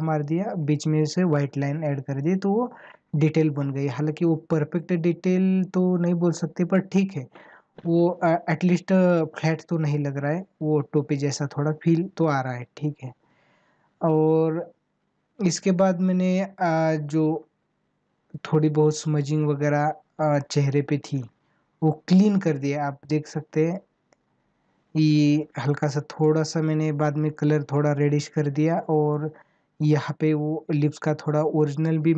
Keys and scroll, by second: 2.4 ctrl+=.